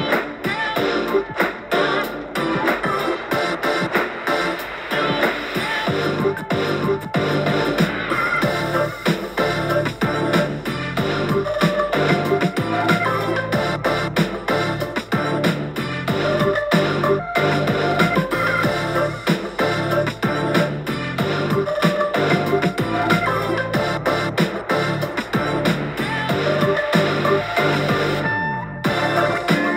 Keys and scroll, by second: 23.0 super+z, 24.8 g.